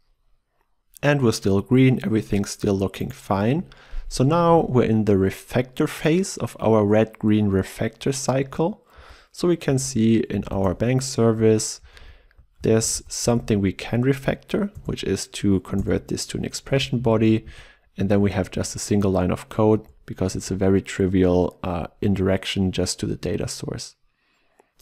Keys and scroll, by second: 4.6 ctrl+e, 14.8 alt+Return, 18.2 ctrl+w.